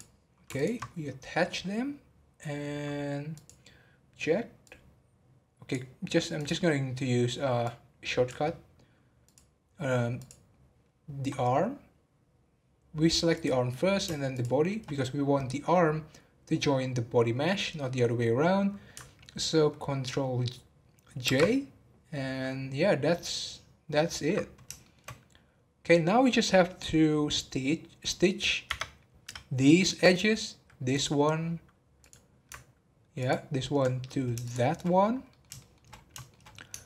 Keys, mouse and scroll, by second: 0.5 ctrl+click, 3.3-6.3 drag, 9.2 click, 10.1 click, 14.3 shift+click, 21.2 ctrl+j, 23.2-24.2 middle drag, 24.2-24.8 scroll up 2, 24.8-27.9 shift+middle drag, 28.7 Tab, 30.9 click, 31.9 click, 33.2 ctrl+click, 34.4 shift+click, 35.2 shift+middle click, 35.9 scroll up 2, 36.2 shift+middle click.